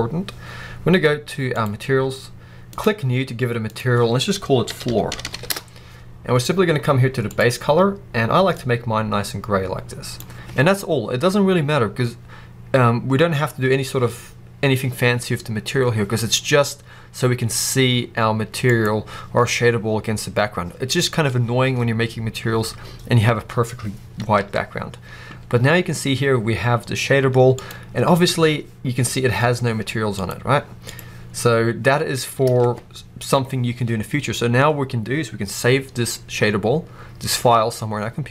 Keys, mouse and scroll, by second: 1.4 click, 2.6-7.8 drag, 5.2 o, 5.4 Return, 18.6 click, 24.3 alt+a, 27.4 click, 30.0 click, 30.7 click, 32.3 alt+a.